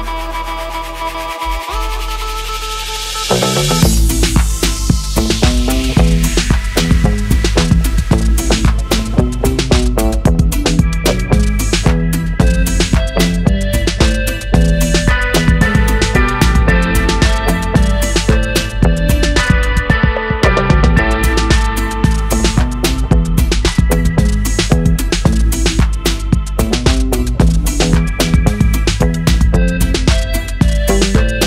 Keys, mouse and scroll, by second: 0.8 shift+a, 10.4 click, 11.2 click, 12.3 click, 15.1-17.8 drag, 20.6 click, 21.4 click, 23.3-24.4 drag, 25.2 shift+click, 25.9-27.3 drag, 28.2-30.7 drag.